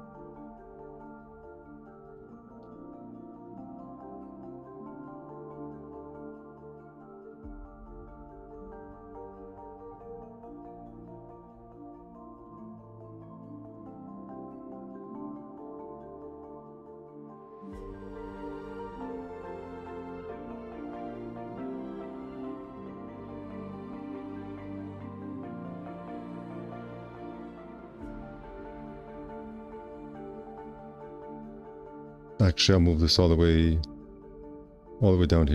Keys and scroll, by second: 3.9 4, 4.2 `, 4.8 2, 5.0 q, 14.0 alt+c, 20.8 4, 21.8 alt+z, 22.6 w, 26.2 q, 27.6 w, 30.5 q, 32.6 w.